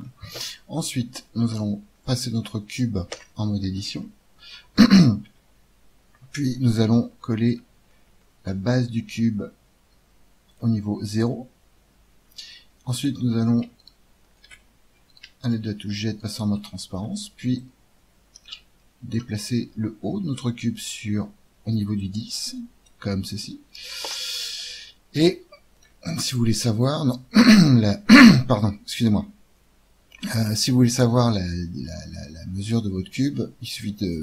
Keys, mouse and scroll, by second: 2.7 right click, 3.1 Tab, 3.1-4.5 drag, 5.2 g, 7.1-8.5 middle drag, 9.1 g, 14.3 z, 17.5-19.1 middle drag, 17.6 click, 17.6 right click, 19.3 middle click, 19.9 middle click, 21.9-23.7 middle drag, 24.0 Tab, 25.7-27.6 drag, 34.0-34.2 drag.